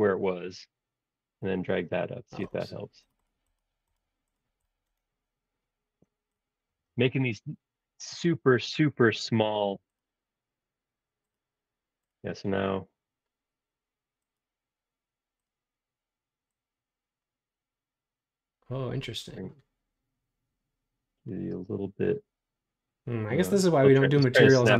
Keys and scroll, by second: 1.5 super+z.